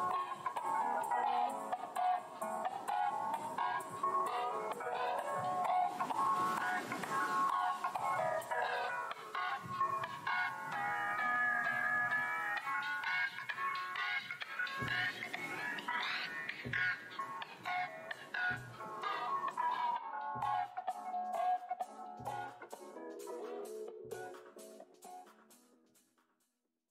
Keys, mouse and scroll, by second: 0.7 right click, 1.7 click, 2.1 shift+v, 4.3 right click, 9.1 click, 9.6 space, 10.4 alt+click, 11.2 click, 13.2 space, 13.8 click, 14.6 alt+click, 15.2 shift+d, 16.2 click, 16.7 space, 17.4 click, 17.7 w, 18.5 click, 18.7 `, 19.4 `, 21.6 alt+scroll down 1, 24.3-25.3 scroll down 1, 25.3-26.9 scroll up 1.